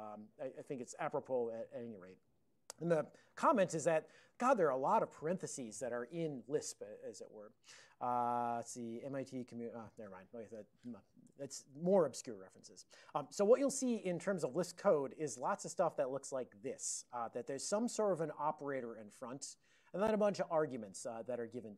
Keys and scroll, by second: 11.5 super+h, 17.6 alt+f, 20.0 alt+f, 20.1 alt+f, 20.7 alt+f.